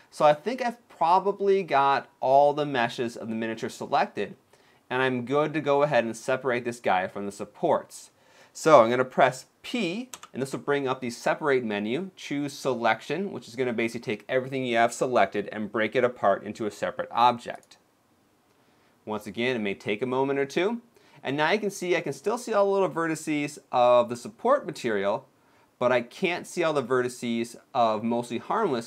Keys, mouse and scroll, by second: 0.3 middle click, 3.5-4.0 scroll down 2, 4.1-5.1 scroll up 1, 9.8 p.